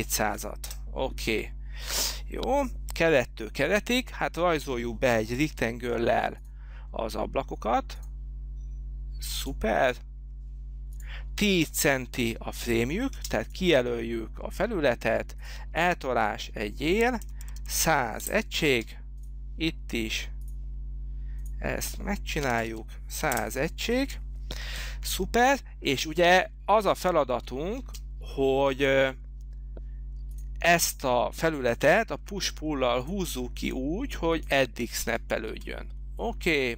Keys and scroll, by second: 0.0-0.5 typing, 0.8 Return, 5.7 r, 13.3 space, 17.2-18.9 typing, 18.4 Return, 22.3-23.2 typing, 23.5 Return, 28.0 space, 32.2 p, 35.7 space.